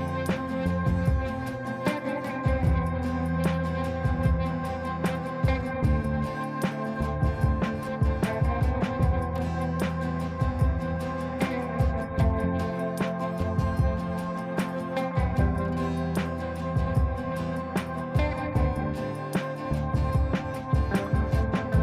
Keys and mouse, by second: 7.2 click, 12.6 click, 18.2 click, 18.3 click, 20.7 F2, 21.1-21.7 drag.